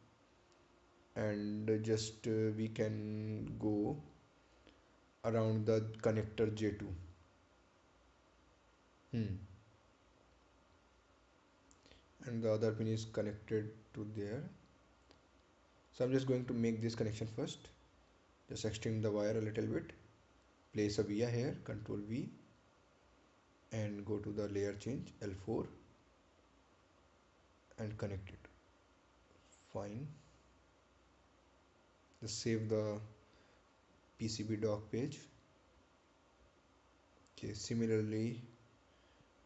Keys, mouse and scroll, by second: 11.5 ctrl+click, 13.3-13.8 scroll up 1, 16.8 click, 22.0 right click, 23.9 ctrl+v, 24.9 click, 25.9 right click, 27.2 click, 31.5 scroll down 1, 32.3 right click, 33.8 click, 36.4 ctrl+click, 38.5-38.9 scroll up 1.